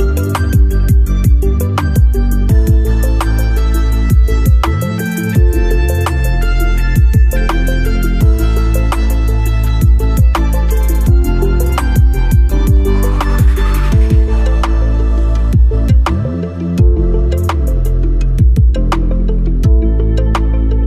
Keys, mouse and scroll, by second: 4.1 click, 6.1 scroll up 1, 8.2 scroll up 1, 9.1 scroll up 1, 9.1-15.3 alt+drag, 15.3 scroll down 1, 15.8-18.9 alt+drag, 18.9 alt+click.